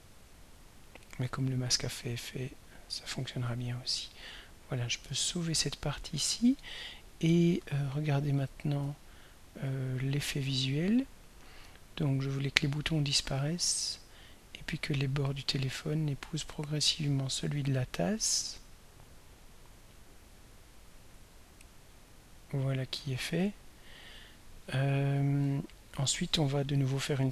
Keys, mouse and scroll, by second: 5.0 ctrl+s, 9.1-9.5 ctrl+scroll down 2, 9.8 ctrl+scroll up 3, 11.2-27.3 drag.